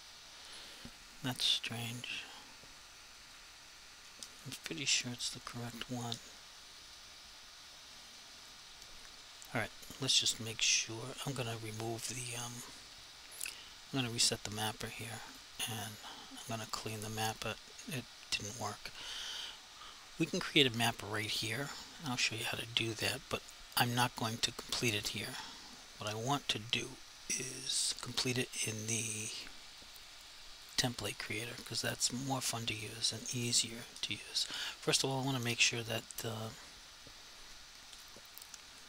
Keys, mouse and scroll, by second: 15.3 click, 29.4 click, 38.0 click.